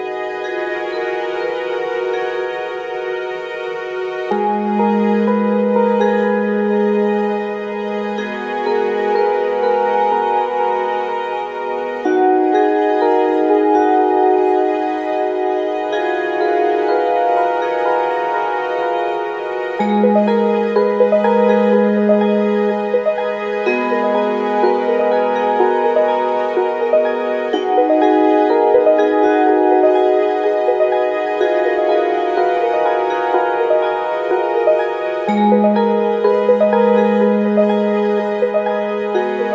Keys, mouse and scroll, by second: 6.7 Tab, 7.3 middle click, 7.6 click, 7.9 Tab, 7.9 middle click, 8.6 shift+click, 8.9 shift+middle click, 9.5 click, 9.8-11.3 shift+middle drag, 10.2 f, 11.3-14.3 shift+drag, 12.2 s, 14.3 middle click, 14.4-16.2 drag, 16.2-17.4 shift+middle drag, 16.4 s, 17.4 click, 18.3-20.5 shift+middle drag, 19.1 g, 20.5-22.6 drag, 20.9 s, 22.6-24.5 middle drag, 23.2 s, 24.5 click, 24.8-27.4 middle drag, 25.1 g, 26.0 g, 27.4 click, 27.7-36.4 middle drag, 27.7 g, 29.1 g, 29.9 click, 30.2 g, 32.2 g, 33.1 g, 35.7 g, 36.4 click, 36.7-39.5 middle drag, 36.7 g, 38.0 g.